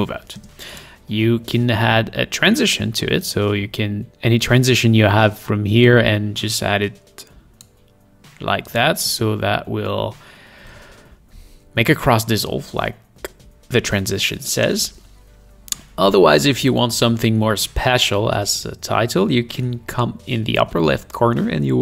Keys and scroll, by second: 0.3 space, 9.0 space, 14.6 space.